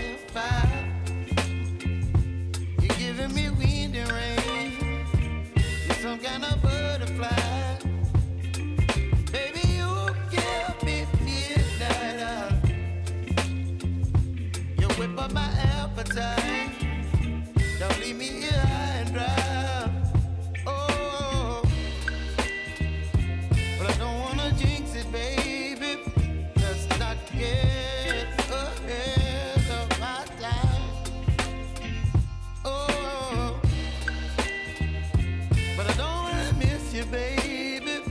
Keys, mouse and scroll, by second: 1.6 ctrl+x, 2.6 click, 3.1 ctrl+shift+v, 3.8-8.4 drag, 8.4 ctrl+x, 9.4 click, 10.0 ctrl+shift+v, 10.5-15.3 drag, 15.3 s, 18.5-21.3 drag, 23.2 ctrl+a, 23.5-27.1 typing, 28.1 click, 35.4 ctrl+i, 36.7-38.1 drag.